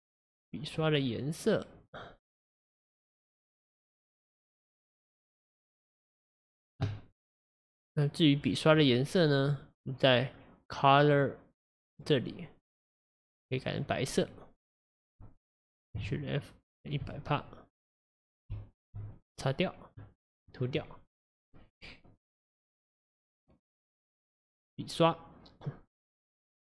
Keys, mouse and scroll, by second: 0.8-3.3 scroll up 4, 4.2 click, 4.7 click, 5.6 click, 7.5-8.4 scroll up 5, 8.4-11.1 scroll down 13, 11.1-16.0 drag, 16.0-17.0 shift+f, 17.4-18.5 drag, 18.5 f, 19.2-22.2 drag.